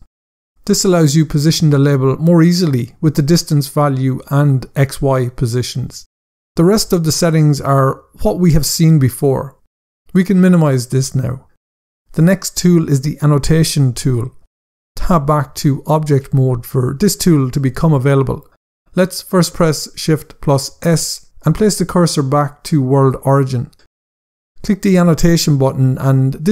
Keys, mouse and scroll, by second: 0.0 Return, 1.4 click, 4.0 click, 5.6 click, 10.3 click, 11.8 scroll up 1, 15.1 Tab, 20.2 shift+s, 21.7 click, 24.7 click.